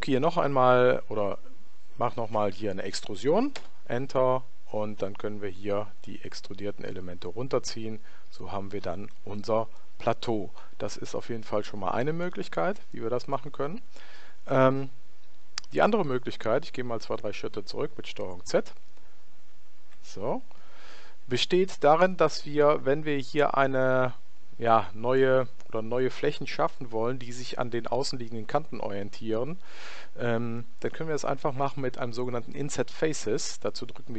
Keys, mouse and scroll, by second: 2.3 e, 5.9 click, 9.7-11.5 middle drag, 12.9-14.6 middle drag, 16.7 ctrl+z, 17.2 ctrl+z, 17.7 ctrl+z, 19.3 ctrl+z.